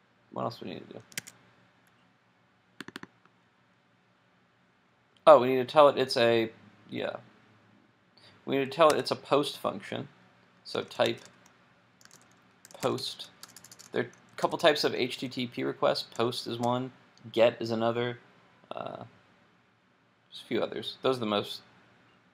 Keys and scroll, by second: 1.2 super+Tab, 8.9 super+w.